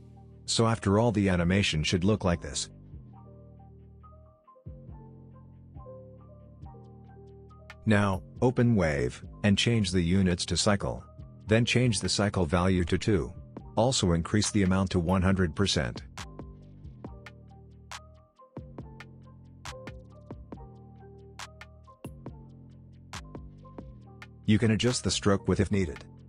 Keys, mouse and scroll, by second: 0.3-0.9 click, 2.3 space, 3.6-5.2 drag, 6.1-7.0 scroll down 1, 7.0 click, 9.0-10.0 scroll down 1, 10.0 click, 10.0 click, 13.3 Return, 14.7 click, 17.9-19.0 scroll down 2, 19.0-19.7 scroll down 1, 20.7 click, 20.7-23.2 drag, 23.5-24.0 scroll up 1, 24.0 scroll down 1, 25.1-26.2 drag.